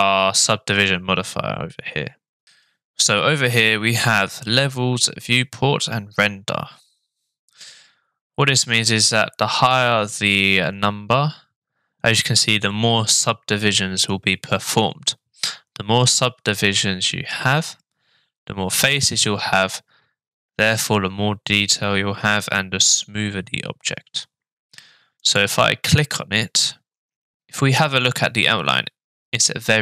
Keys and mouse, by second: 25.3 click.